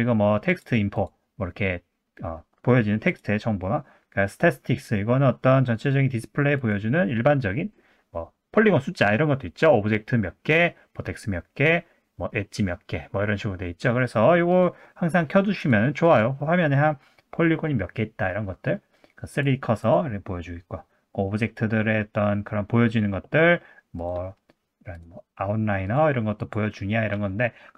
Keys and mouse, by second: 3.1-7.8 drag, 14.6-23.9 drag, 25.0-27.7 drag.